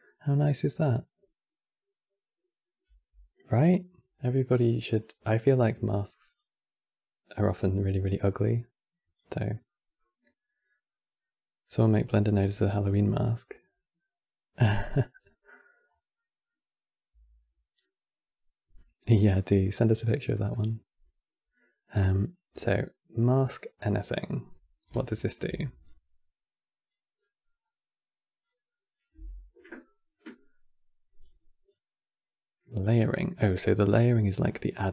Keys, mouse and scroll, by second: 4.9 click, 6.0 click, 9.4-13.6 middle drag, 14.3 click, 15.0 middle click, 15.6 scroll down 3, 15.8-17.1 middle drag, 17.1-17.5 scroll down 1, 17.5-22.4 middle drag, 22.4 click, 23.9 click, 24.9 ctrl+shift+click, 25.5-26.9 drag, 26.9 middle click, 27.3-28.1 scroll up 6, 28.1-31.1 drag, 31.4-34.4 drag.